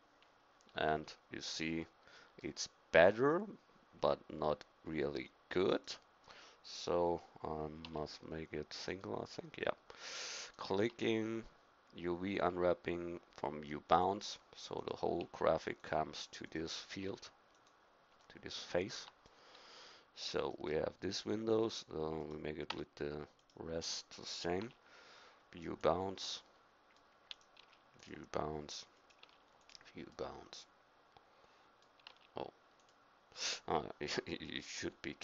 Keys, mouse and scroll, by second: 1.4-2.8 middle drag, 5.7-7.8 drag, 7.8 u, 10.0-14.0 drag, 10.9 u, 14.8-19.0 drag, 15.2 u, 17.0 u, 19.0 Tab, 22.3 click, 22.7 Tab, 23.4-24.6 drag, 24.6 u, 27.6 u, 29.2 u, 30.3 middle click, 32.1 u, 34.1 KP_3, 34.8 KP_1.